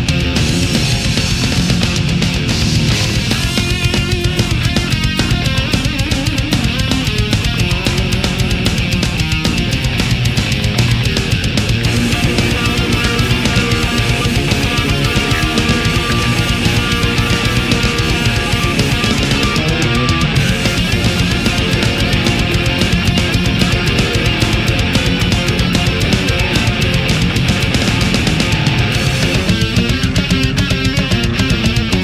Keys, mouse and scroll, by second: 2.1 shift+right click, 2.6 shift+right click, 3.1 shift+right click, 3.5-4.9 shift+middle drag, 5.1-7.1 drag, 7.3-8.4 middle drag, 8.6-9.3 middle drag, 9.5-12.3 middle drag, 12.9 a, 13.1-17.0 middle drag, 17.0 click, 18.1 space, 19.4 click, 20.7 click, 22.6 click, 25.6 click, 26.4 Return, 27.6 a, 29.4 click, 30.4 right click.